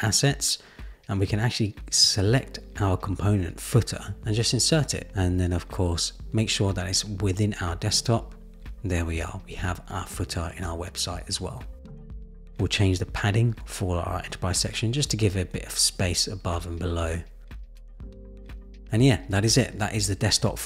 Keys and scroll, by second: 13.8 shift+Up, 14.7 shift+Up.